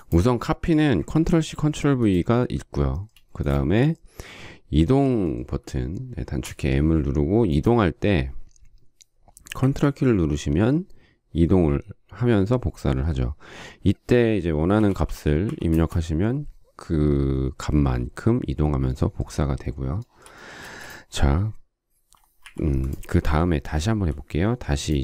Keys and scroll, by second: 1.1 ctrl+c, 1.5 ctrl+v, 3.3 space, 6.4 m, 14.5-15.9 typing, 20.6 space, 22.4 Delete, 23.9 m.